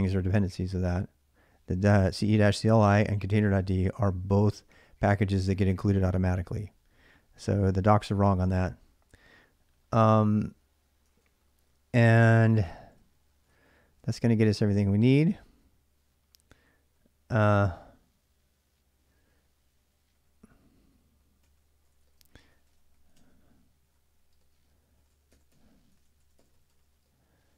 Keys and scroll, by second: 10.9 ctrl+a, 11.1 ctrl+a, 12.0 ctrl+[, 12.1-16.7 typing, 18.8-27.5 typing.